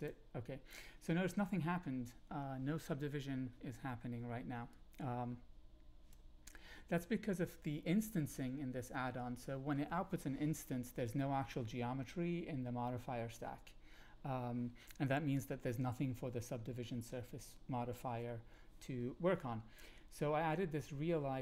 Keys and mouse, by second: 4.7-6.1 drag.